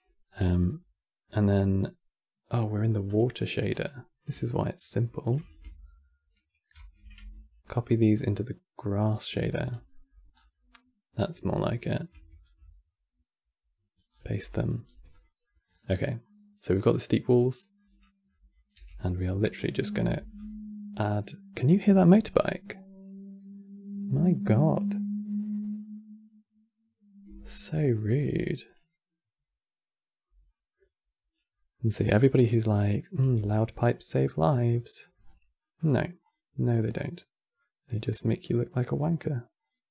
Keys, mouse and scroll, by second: 0.1 scroll down 5, 0.3-2.8 middle drag, 2.8 click, 4.1 shift+click, 6.4 ctrl+c, 6.9 Tab, 7.3-8.7 middle drag, 8.7 click, 9.6 middle click, 10.0 scroll down 4, 10.2-11.6 middle drag, 11.6 click, 12.3 ctrl+v, 13.8 scroll down 4, 14.0-14.4 middle drag, 14.4 g, 15.1 middle click, 15.4-15.8 scroll up 8, 15.8-16.3 middle drag, 16.3 click, 16.6-18.0 middle drag, 18.0 click, 18.4 g, 19.1-19.7 middle drag, 19.7 click, 19.9 shift+d, 30.2 middle click, 30.5 scroll down 2, 31.2-31.6 middle drag, 31.6 scroll down 3, 31.8-32.3 middle drag, 32.3 click, 32.9 g, 34.7 middle click, 34.9-35.3 scroll up 7, 35.3-35.9 middle drag, 35.9 click, 36.7-37.8 drag, 37.8-39.3 middle drag, 39.3 click.